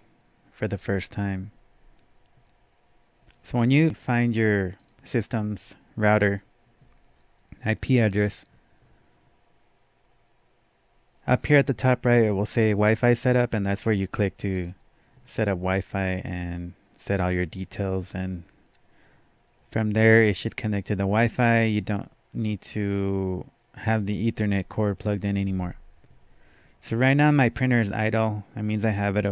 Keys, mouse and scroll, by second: 4.0 click, 4.8 click, 14.5 click, 16.3 right click, 17.1 click.